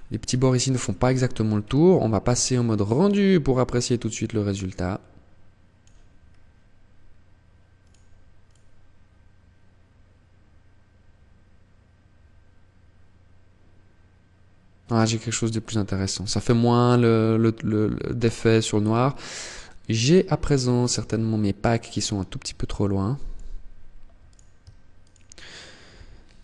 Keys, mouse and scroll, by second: 2.8 click, 5.2-6.8 scroll down 1, 6.8 click, 20.5 click, 23.3 right click, 24.0 shift+right click, 25.8 g.